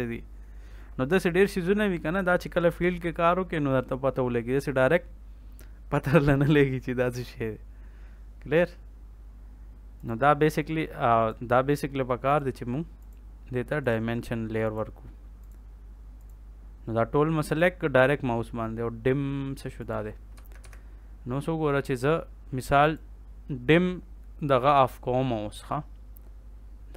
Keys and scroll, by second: 20.3 Escape.